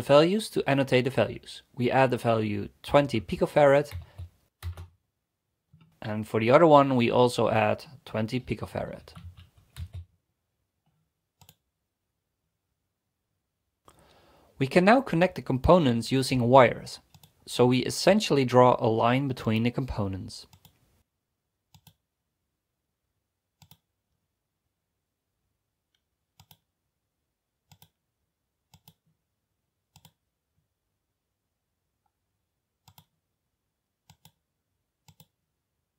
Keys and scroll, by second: 0.3 e, 2.7-4.0 typing, 4.7 Return, 7.3 typing, 8.5-10.3 typing.